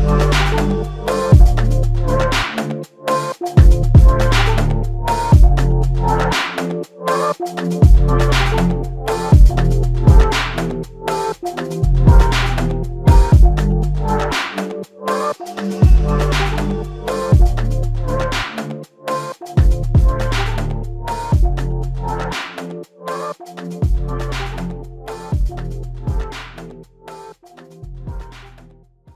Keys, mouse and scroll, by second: 0.7 alt+click, 6.7 alt+click, 8.3 alt+click, 19.4 alt+click, 23.0 ctrl+alt+click, 23.9 alt+click.